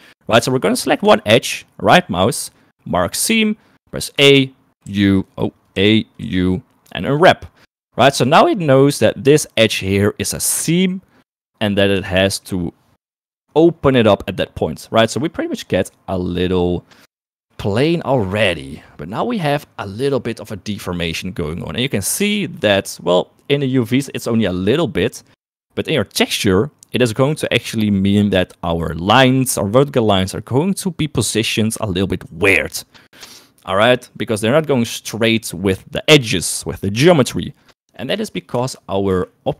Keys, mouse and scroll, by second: 1.0 click, 2.0-3.4 right drag, 4.2-6.2 typing, 7.4 typing, 8.2 shift+middle click, 9.0 middle click, 12.2 shift+middle click, 17.5 shift+middle click, 22.3 shift+middle click, 26.3 middle click, 38.5 space, 39.1 space.